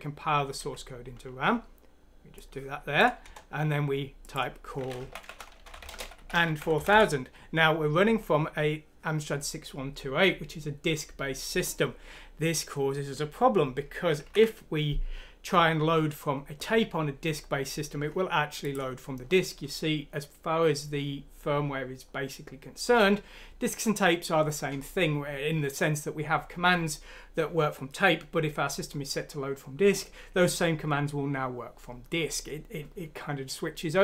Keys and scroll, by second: 0.5 F9, 3.1 Return, 4.9-6.8 typing, 14.1 ctrl+F9.